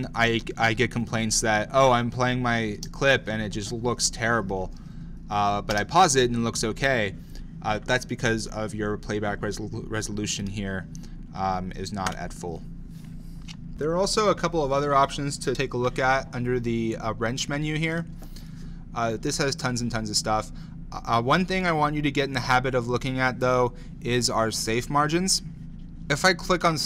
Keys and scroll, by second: 2.8 space, 5.8 space.